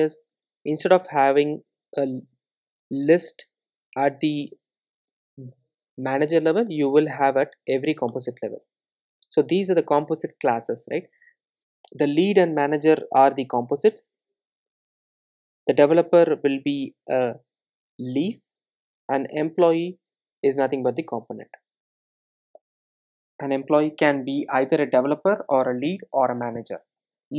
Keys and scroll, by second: 0.3 super+e, 3.6 super+c, 4.9 super+c, 5.1 super+e, 8.5 super+v.